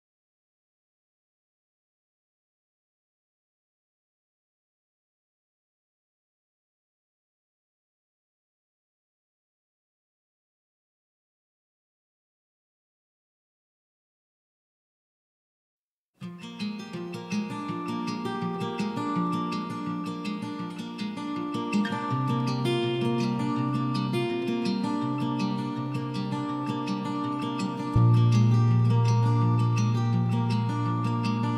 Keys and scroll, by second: 3.6 ctrl+a, 4.6 ctrl+h, 11.9 Escape, 12.1 Escape.